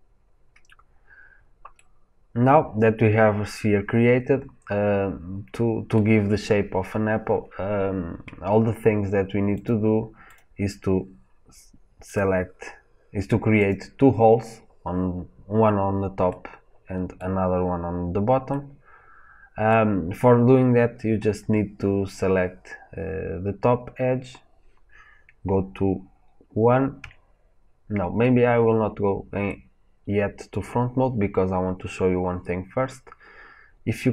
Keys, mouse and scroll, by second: 2.0 middle click, 2.8 middle click, 4.4 middle click, 5.6-9.4 middle drag, 7.9-9.4 scroll up 2, 9.4 click, 10.2 click, 11.9 click, 13.5 click, 16.2-22.4 middle drag, 26.9 KP_1, 29.4 middle click.